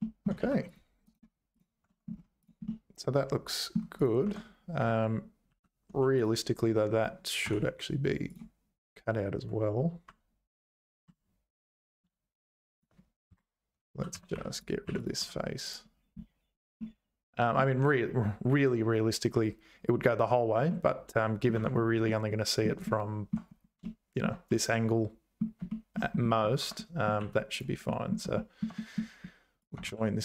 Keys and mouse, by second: 0.0 shift+click, 0.4 2, 1.1 right click, 1.9 Tab, 2.7-3.7 middle drag, 4.2 Tab, 5.5 2, 5.9 1, 6.2-7.3 drag, 7.4 k, 13.9-15.2 typing, 14.5 click, 16.8 middle click, 20.7 middle click, 21.6 Tab, 22.1 middle click, 22.9 shift+middle click, 24.5 middle click, 25.7 shift+click, 25.8 shift+middle click, 26.6 Tab, 26.8 middle click, 27.2 2, 27.5 click, 27.9 middle click, 28.3 shift+middle click, 28.8 middle click, 29.9 f.